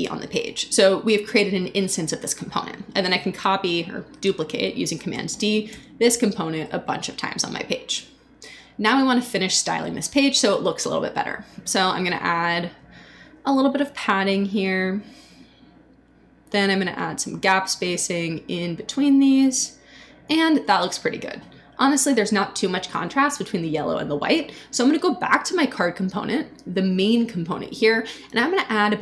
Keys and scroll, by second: 5.3 super+d.